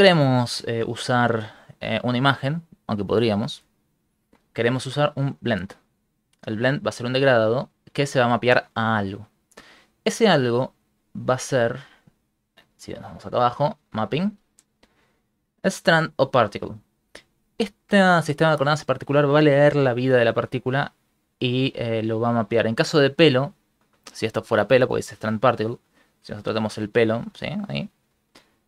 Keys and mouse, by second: 3.8 click, 9.9 middle click, 11.2 click, 12.6 middle click, 13.1 middle click, 14.5 click, 24.7 click, 25.5 click, 26.3 click, 27.8 click.